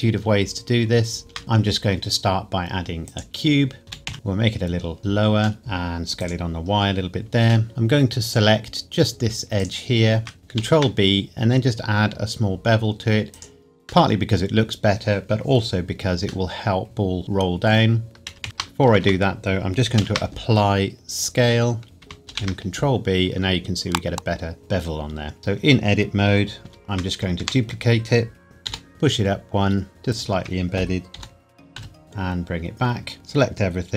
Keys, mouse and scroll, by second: 1.2 shift+a, 3.1 click, 3.9 s, 4.1 z, 5.0 click, 5.6 y, 6.2 click, 6.7-7.0 scroll down 1, 7.7 Tab, 8.2 click, 10.5 ctrl+b, 13.3 click, 14.1 middle click, 18.1 scroll up 1, 18.3 ctrl+z, 19.0 Tab, 20.0 ctrl+a, 21.2 click, 22.0 Tab, 22.2 shift+click, 22.3 ctrl+b, 25.4 a, 26.7 shift+d, 27.4 Escape, 28.7 g, 28.9 z, 30.1 shift+click, 31.2 g, 31.8 x, 33.2 a, 33.8 scroll down 1.